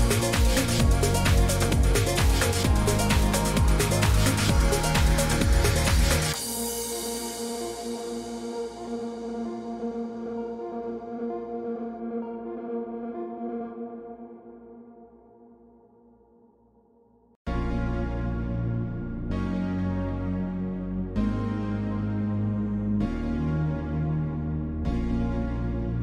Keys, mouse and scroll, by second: 3.9 0, 4.6 4, 5.1 Return, 9.6 click, 11.6 click, 14.9 click, 21.3 click, 21.9 click, 24.1 click.